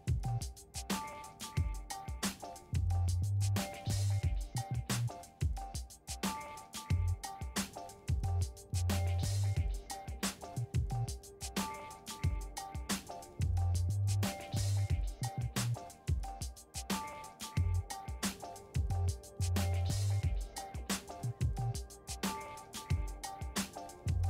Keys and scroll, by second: 1.3-2.7 typing, 2.8 Return, 7.1-8.4 typing, 8.8 Return, 11.9 v.